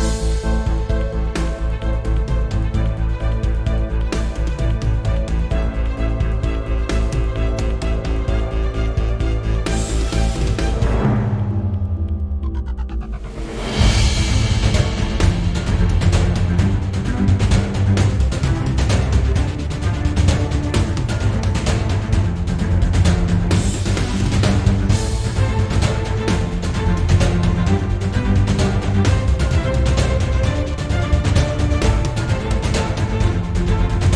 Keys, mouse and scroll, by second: 1.1 click, 1.6 shift+click, 1.9-2.9 right drag, 2.9 click, 3.0 g, 3.8 click, 3.8 g, 4.5 click, 4.6 g, 5.3 click, 5.4 scroll down 1, 5.6-6.3 shift+middle drag, 5.9-6.3 scroll up 1, 6.3 click, 6.4 g, 7.3 click, 8.6 g, 9.5 click, 9.6 g, 10.2-10.6 scroll down 1, 10.6 shift+click, 10.9-12.1 right drag, 11.7-12.1 scroll up 1, 12.1-12.5 shift+middle drag, 12.5 click, 12.6 g, 13.7 click, 13.8 g, 14.7 click, 14.7 g, 15.7 click, 15.9 g, 16.6 click, 16.6 g, 17.0 right click, 17.2 click, 17.4 g, 18.0 click, 18.1 scroll down 1, 18.3-19.3 shift+middle drag, 19.3 click, 19.9 click, 20.0 g, 20.5 click, 22.8-23.5 scroll down 2, 23.5 shift+middle click, 23.8-25.1 scroll up 4, 25.1 click, 25.2 g, 25.8 Escape, 25.9 click, 26.1 g, 27.1 click, 27.4 g, 28.4 click, 28.4 g, 28.8 right click, 29.0 click, 29.3 g, 29.8 click, 30.3 g, 31.0 drag, 31.3 g, 32.1 drag, 32.3 g, 32.9 click, 33.2 click, 33.4 g, 34.0 click.